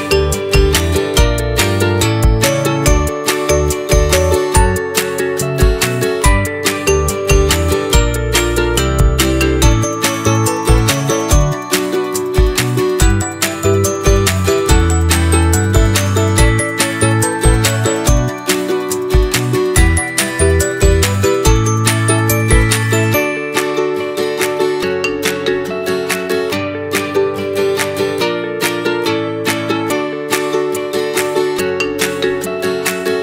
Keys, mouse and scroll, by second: 1.0 click, 2.4 click, 4.8 click, 5.6-6.1 middle drag, 6.1-6.4 scroll down 2, 6.4 middle click, 6.7-7.1 scroll down 2, 7.1-7.6 middle drag, 7.6 g, 9.8-10.4 middle drag, 10.4 click, 10.7-12.1 middle drag, 12.1-12.7 scroll up 3, 12.7-13.2 scroll down 4, 13.2-14.7 shift+middle drag, 14.7-15.4 scroll down 3, 15.9 click, 16.9 shift+right click, 17.4-18.0 scroll down 5, 18.6-19.0 middle drag, 19.0 shift+a, 21.7-24.9 drag, 24.9-25.9 middle drag, 25.9-27.1 drag, 27.1-28.5 middle drag, 28.5 r, 31.7 click, 32.9 s.